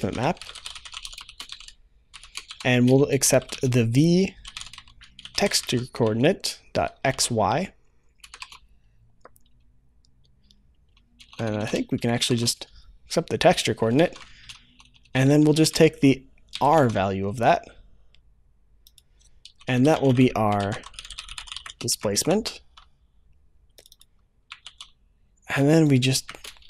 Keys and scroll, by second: 16.8 ctrl+s, 24.5 ctrl+c.